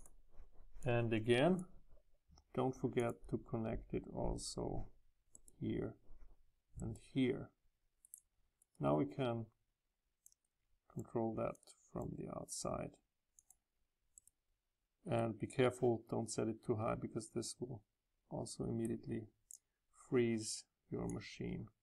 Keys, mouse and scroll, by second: 0.0 click, 0.2 Delete, 0.8-5.0 drag, 5.5-8.0 middle drag, 8.0 right click, 10.2-14.2 drag, 15.1-19.5 right drag, 19.5-20.0 drag.